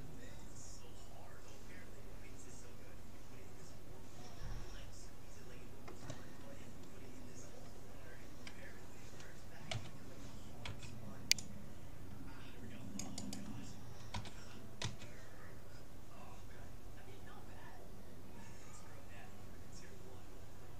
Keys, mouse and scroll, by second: 3.5 middle click, 9.7 a, 10.7 c, 13.3-15.1 drag, 14.1 g.